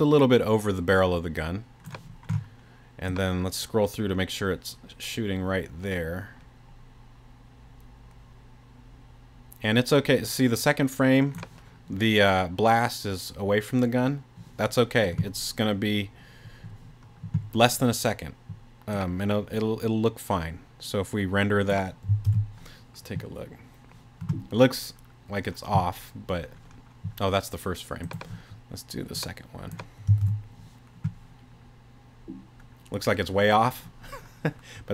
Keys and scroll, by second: 22.3 super+r, 30.2 super+r.